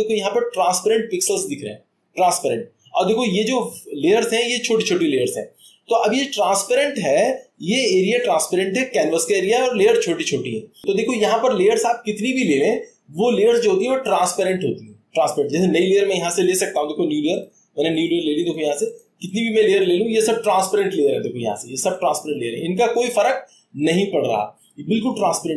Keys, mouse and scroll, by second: 5.0 click, 17.4 click, 18.0 click, 18.4 click, 18.9 click, 19.3 click, 19.6 click, 19.8 click, 22.9-24.1 drag.